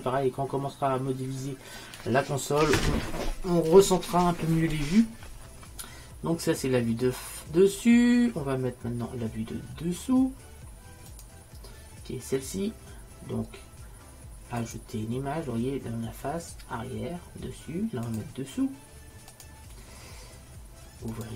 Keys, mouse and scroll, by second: 11.2-13.0 drag, 14.7-16.5 drag, 18.1-20.0 drag, 21.2 click.